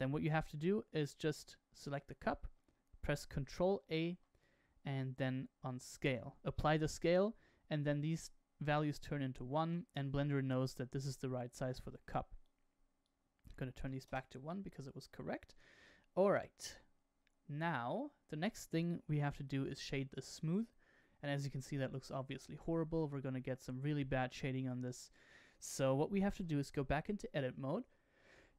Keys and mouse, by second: 3.8 ctrl+a, 12.4-14.5 drag, 15.8-16.3 shift+middle drag, 16.6-18.3 middle drag, 19.8-20.3 right drag, 21.3-25.1 middle drag, 26.2 Tab.